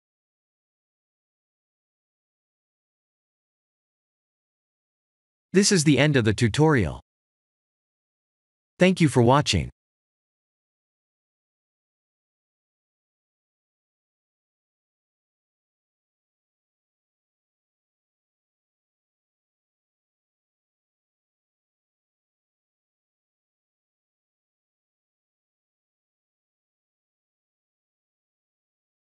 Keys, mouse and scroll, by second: 0.2 click, 0.5 middle click, 2.7 click, 3.4 shift+a, 4.3 s, 7.5 click, 8.0 click, 8.3 middle click, 9.7 click, 10.4 scroll down 2, 11.5 s, 12.8-13.3 scroll up 2, 13.3 middle click, 19.8 click, 20.3 click, 26.6 ctrl+space.